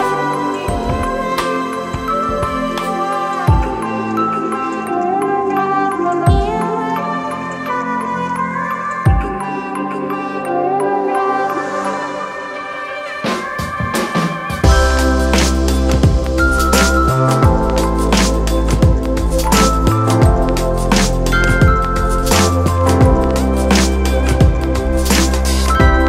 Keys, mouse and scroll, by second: 0.3 ctrl+click, 1.9 ctrl+click, 4.4 ctrl+click, 14.2 ctrl+-, 25.9 ctrl+d.